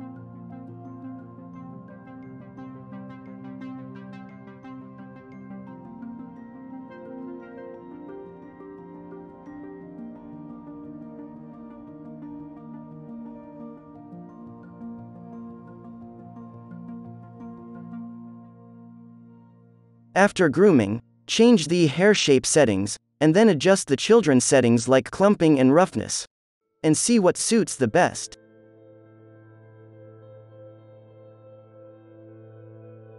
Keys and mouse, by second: 0.3 ctrl+l, 0.9 middle click, 1.1-2.1 drag, 1.6-5.9 typing, 3.8-5.6 drag, 5.2 alt+a, 5.8 middle click, 6.4 ctrl+l, 6.8-8.5 drag, 7.1 middle click, 7.2-14.9 typing, 7.7 alt+a, 8.5 middle click, 8.9-20.6 drag, 8.9 right click, 10.1 middle click, 10.1 right click, 13.6 middle click, 13.6 right click, 14.3-16.1 middle drag, 14.3-16.1 right drag, 16.5-21.9 middle drag, 16.5-18.0 right drag, 18.2 alt+a, 18.7 ctrl+s, 21.8-26.0 drag, 25.1-28.4 middle drag, 26.6 ctrl+s, 26.9 alt+a, 29.4-33.1 drag.